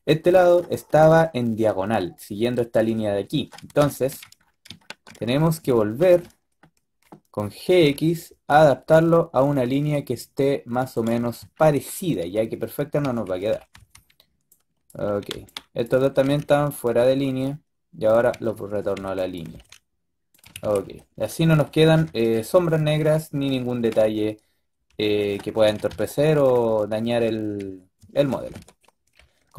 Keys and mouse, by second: 7.6 g, 12.9 a, 13.2 a, 13.4 a, 13.6 b, 15.2 b, 16.0 g, 18.2-20.5 typing, 21.8 KP_5, 22.4 z, 25.5 KP_3, 25.8 KP_5, 28.4 z.